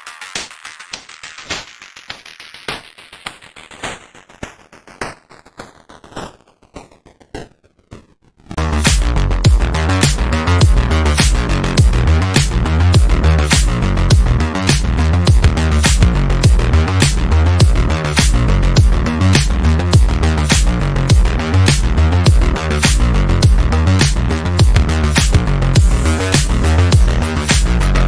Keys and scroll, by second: 1.0 F3, 1.2 Escape, 3.6 shift+Page_Down, 6.2 shift+F2, 6.3 Escape, 8.1 Escape, 12.1 ctrl+q, 14.6 ctrl+g, 14.8 F3, 23.2 shift+Page_Down, 23.4 w, 24.8 shift+F2, 24.9 Escape, 25.2 d, 25.5 F3, 27.8 f.